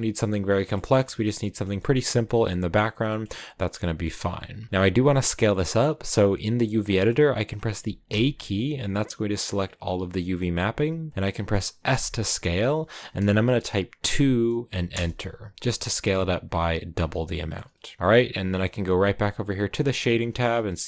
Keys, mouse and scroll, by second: 0.8-1.3 scroll up 4, 1.3-3.1 middle drag, 3.1-3.6 scroll down 5, 3.6 middle click, 4.3-6.3 scroll up 2, 8.0 a, 11.8 s, 16.0 middle click, 16.8 scroll up 4, 17.1-19.6 middle drag, 19.6 click, 20.8 scroll up 1.